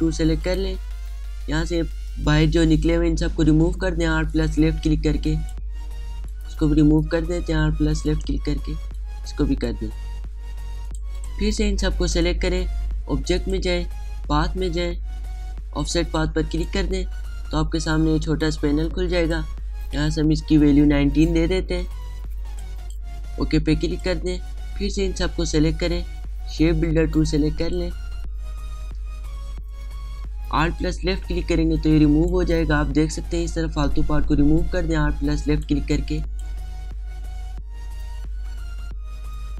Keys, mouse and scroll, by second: 0.3 right click, 1.1 click, 5.0-6.9 alt+drag, 6.9-9.6 alt+drag, 9.6-14.0 alt+drag, 16.7-21.8 drag, 21.8-22.6 typing, 23.1-27.6 drag, 27.6 right click, 28.3 click, 29.9 alt+scroll down 1, 30.0-31.1 alt+scroll up 2, 32.4 alt+click, 34.1-36.1 alt+drag, 36.7 space, 36.8 click, 37.4 alt+scroll down 1, 37.8 alt+scroll up 1.